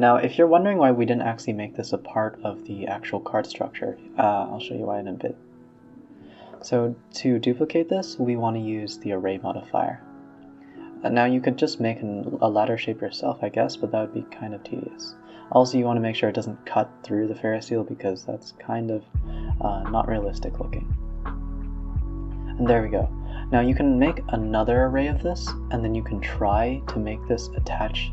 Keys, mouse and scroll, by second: 0.4 click, 0.6-1.0 middle drag, 1.0 shift+click, 1.4 middle drag, 1.6-2.0 scroll down 6, 2.0 e, 2.5-2.9 scroll down 3, 2.9 g, 3.5-4.4 middle drag, 4.4-4.7 scroll up 1, 4.7 middle drag, 4.9-5.5 alt+scroll down 5, 5.5-6.0 middle drag, 6.0 g, 6.9-7.4 scroll up 6, 7.4 Tab, 8.1-13.2 drag, 13.2 middle click, 13.4 Tab, 13.8 scroll down 2, 13.9-17.3 typing, 14.9 middle drag, 17.1 middle click, 17.8 middle click, 18.0-18.6 scroll down 4, 18.2 middle click, 18.6-19.9 middle drag, 19.9-21.7 drag, 21.7 middle click, 22.0 scroll up 3, 22.1 a, 22.2 a, 22.4 middle drag, 22.6 Tab, 22.8 Tab, 23.0-24.9 middle drag, 24.9 click, 25.1 Tab, 25.5-26.0 middle drag, 26.0 scroll down 2, 26.3-27.7 middle drag, 27.7-28.1 scroll down 1.